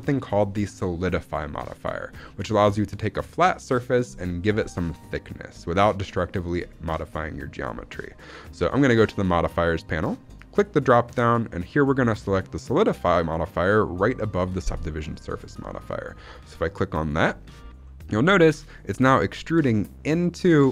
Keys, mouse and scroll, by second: 10.4-15.0 drag, 17.7-18.1 middle drag, 18.2 scroll up 2, 18.5 middle click, 20.6 scroll down 1.